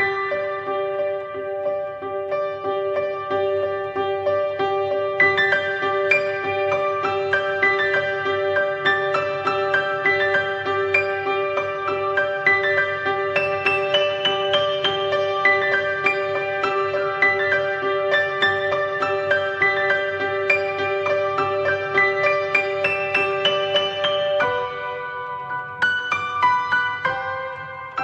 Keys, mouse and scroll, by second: 2.8-3.9 scroll down 3, 4.8 click, 9.5-15.3 drag, 15.3 scroll up 1, 16.0-16.7 middle drag, 16.7-17.2 scroll down 3, 17.2 scroll down 1, 18.5 click, 22.9 click, 25.9 click.